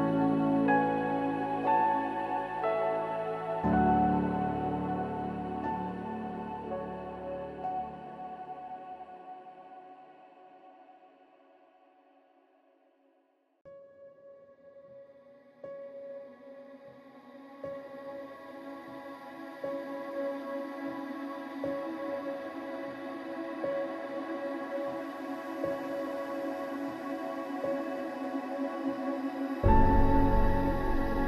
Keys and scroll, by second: 22.9 ctrl+z.